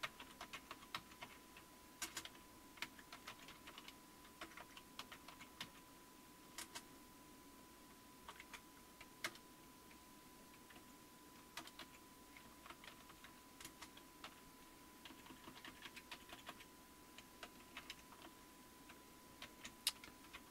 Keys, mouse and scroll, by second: 0.0-6.6 typing, 8.3-9.2 typing, 10.7-14.2 typing, 15.1 Down, 15.3 Down, 15.4 Down, 15.6 Down, 15.8-17.8 Down, 16.1 Up, 16.3 Up, 17.6-18.7 typing, 19.4 ctrl+x.